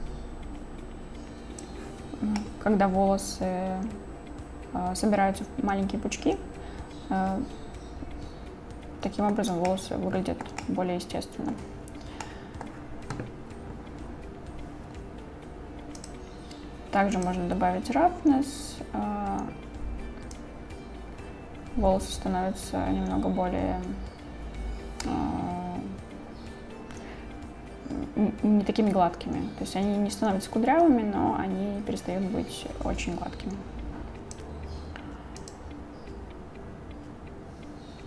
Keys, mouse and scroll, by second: 2.4-9.3 middle drag, 9.7-10.5 shift+middle drag, 10.7-11.5 middle drag, 12.3 middle click, 16.0 click, 17.2 click, 20.4-34.4 drag, 35.4 click.